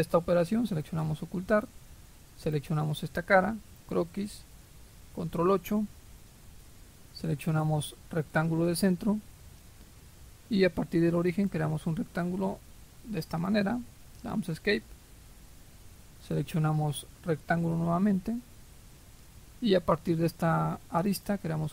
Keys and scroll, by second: 5.0 ctrl+8, 14.2 Escape.